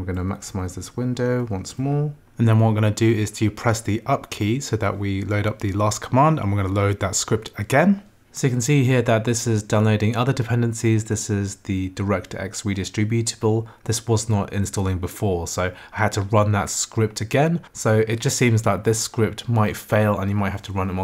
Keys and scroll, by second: 0.2 super+=, 2.2 Up.